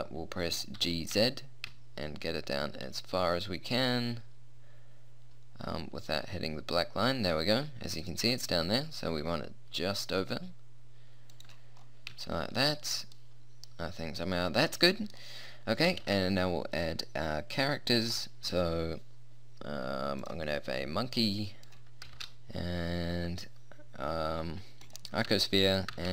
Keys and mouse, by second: 0.8 g, 11.8 middle click, 13.4 middle click, 13.5 middle click, 13.6 middle click, 14.2 middle click, 14.6 middle click, 15.2 middle click, 16.0 shift+a, 21.4 click, 22.2 shift+a, 23.2-25.0 drag, 26.0 shift+a.